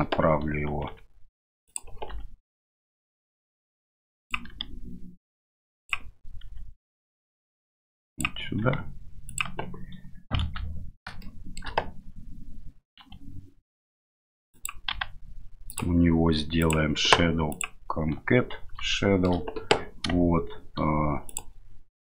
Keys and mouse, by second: 0.9 g, 2.1 r, 4.5 g, 6.5 r, 8.6 g, 10.4 KP_7, 11.3 shift+middle drag, 13.0 r, 14.9 g, 16.6 click, 17.5 click, 19.0 shift+middle click, 21.2 click.